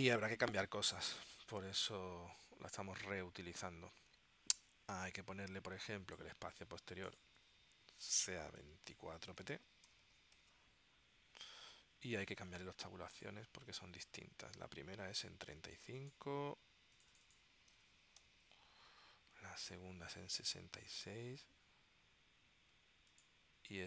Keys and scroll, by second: 9.3-10.6 typing, 17.9 3, 18.3 5, 18.6 Tab.